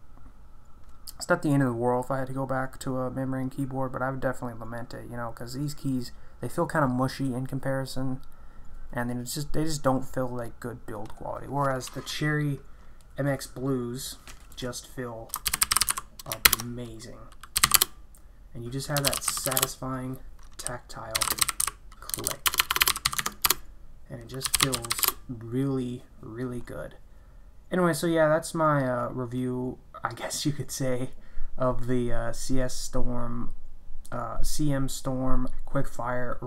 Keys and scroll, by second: 15.2-25.4 typing, 16.4 ctrl+BackSpace.